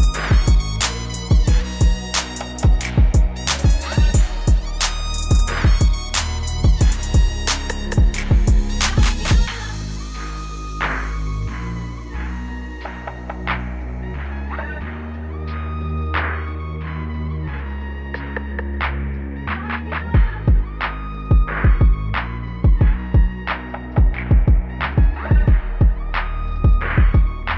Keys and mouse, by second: 4.4 e, 9.8 y, 11.7 KP_9, 13.8 Return, 18.3 right click, 21.0 e, 22.5 KP_Subtract, 25.1 y, 25.1 KP_9, 25.7 Return.